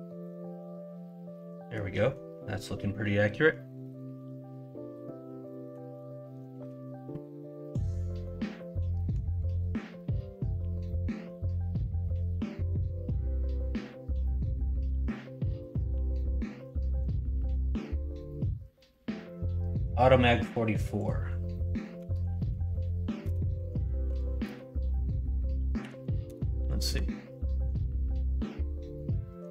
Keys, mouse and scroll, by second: 3.8-5.7 middle drag.